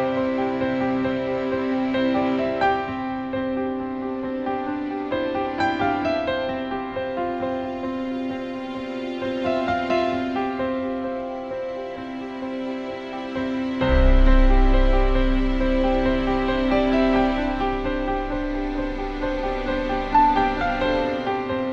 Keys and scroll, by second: 21.0 BackSpace, 21.6 BackSpace.